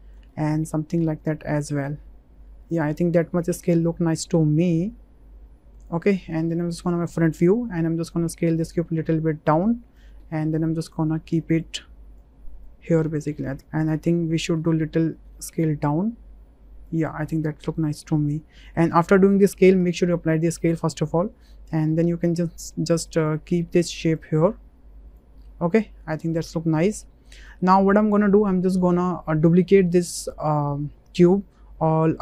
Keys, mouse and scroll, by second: 0.4-0.7 drag, 1.3-2.7 drag, 2.8-3.8 middle drag, 4.6-5.8 drag, 7.0 shift+drag, 8.3-9.9 drag, 10.1 w, 10.6 click, 11.7 click, 12.7 click, 13.5 s, 13.5 z, 14.5 s, 15.6 z, 16.8 click, 18.0-18.8 drag, 19.8 ctrl+a, 20.8 drag, 21.5 shift+middle drag, 21.6 shift+click, 21.8-22.3 middle drag, 24.2 click, 25.5-26.2 drag, 26.2-27.3 middle drag, 27.5 shift+middle click, 28.3 middle click, 29.9-31.1 drag.